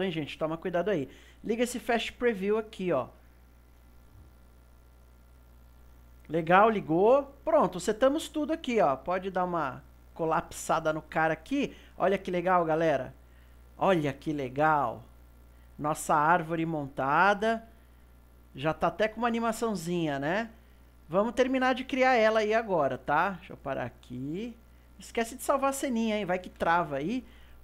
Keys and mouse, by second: 9.3-12.3 drag, 12.7-15.8 drag, 16.8-24.1 middle drag, 24.1 click, 24.8-26.5 drag, 26.5 ctrl+s.